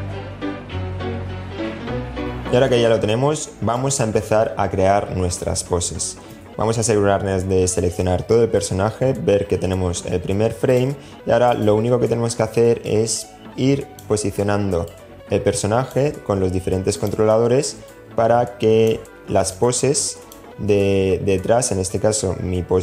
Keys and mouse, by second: 0.0-1.7 typing, 1.0 super+z, 1.8 shift+middle click, 1.9 middle click, 2.6 middle click, 5.5 a, 10.7 click, 12.0-13.3 drag, 14.1-15.1 drag, 17.1-18.1 drag, 18.7 click.